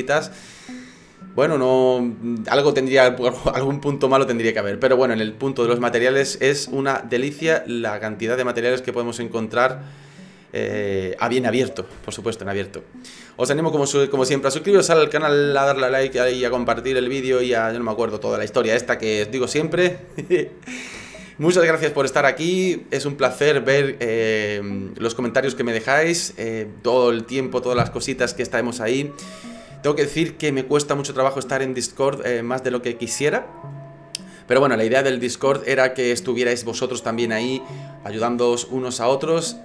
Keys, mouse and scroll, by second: 7.2 click.